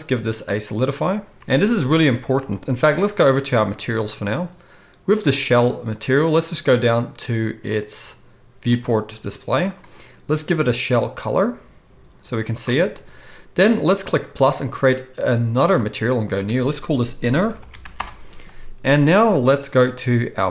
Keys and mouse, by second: 1.3 z, 2.3 z, 4.2-6.6 middle drag, 6.6-9.7 drag, 9.7-14.2 middle drag, 14.2-20.5 drag, 17.6 n.